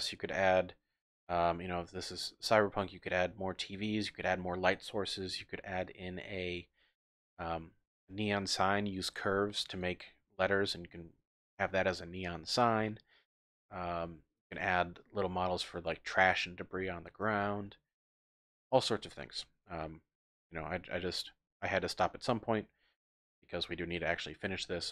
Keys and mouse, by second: 2.0-2.8 middle drag, 3.6-6.8 middle drag, 9.7 click, 9.9 typing, 14.6 shift+drag, 15.1-15.4 drag, 18.2-18.6 drag, 18.6 middle click, 19.8-20.1 middle drag.